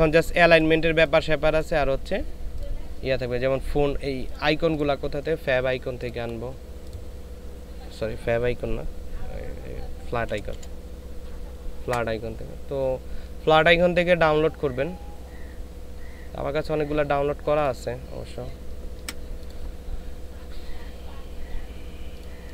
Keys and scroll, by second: 10.3 f, 10.5 l, 11.8 Return.